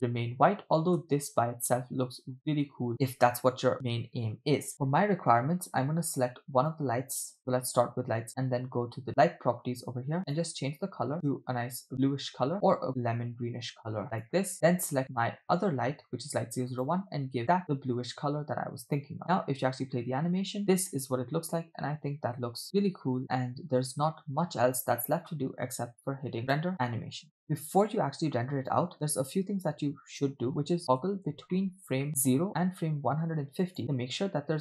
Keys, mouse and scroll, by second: 0.0-0.5 scroll up 2, 0.6 scroll down 1, 1.1 space, 2.9 space, 3.1 space, 4.7 space, 6.6 click, 7.4 click, 9.1 click, 10.2 click, 15.1 click, 16.7 click, 19.2 space, 20.3 space, 20.6 space, 24.1 space, 26.4-27.4 drag, 27.5-28.8 drag, 31.1-31.6 scroll up 2, 31.6-32.1 shift+middle drag, 33.6 click.